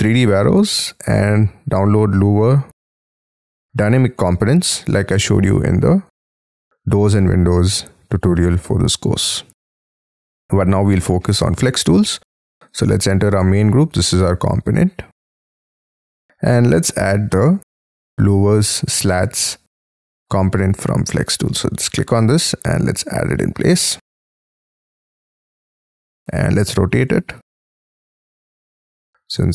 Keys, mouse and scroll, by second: 0.3-1.1 scroll up 5, 1.1 middle click, 1.8-2.2 scroll down 7, 2.2-3.0 scroll up 5, 3.0 middle click, 3.5-4.1 scroll down 13, 4.1 shift+middle click, 5.2-5.7 scroll up 12, 6.5-6.9 scroll down 12, 7.1 middle click, 7.8-8.3 scroll down 7, 8.4 shift+middle click, 9.2 space, 9.5 Escape, 10.7 middle click, 11.3 Escape, 12.1 double click, 13.5 double click, 13.8 right click, 22.3-22.7 scroll up 5, 23.9-24.4 scroll up 12, 24.5 middle click, 26.0 space, 26.1 scroll up 5, 26.2 q, 27.0 double click, 27.8-29.3 typing.